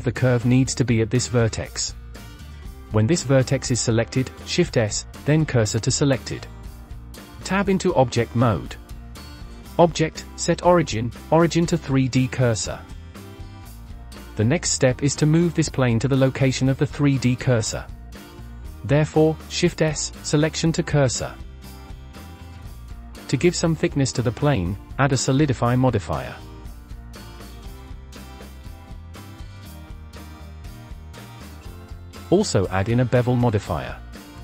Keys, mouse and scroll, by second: 0.2 scroll up 2, 0.4 click, 1.3-2.0 scroll down 1, 2.0 click, 2.8 click, 4.4 shift+s, 7.5 Tab, 9.8-12.8 drag, 15.1 click, 19.1 shift+s, 21.7-22.1 scroll up 7, 22.1-22.4 middle drag, 22.4 scroll up 1, 22.6 shift+middle click, 22.7 click, 22.8 click, 24.2 click, 27.1 middle click, 27.8-28.1 scroll down 5, 28.1-29.5 drag, 30.7-31.2 drag, 31.2 scroll up 3, 31.9-32.5 drag, 34.2 click.